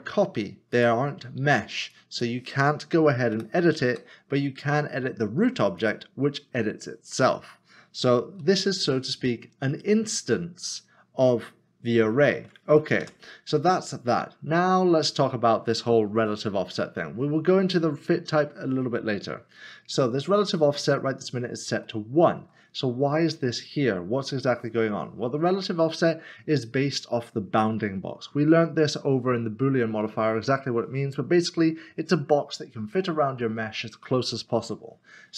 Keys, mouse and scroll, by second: 0.7 click, 3.9 typing, 5.8 click, 8.4 ctrl+z, 13.0 Tab, 13.8 Tab, 14.0 scroll down 1, 20.7 scroll up 1, 21.8 middle click.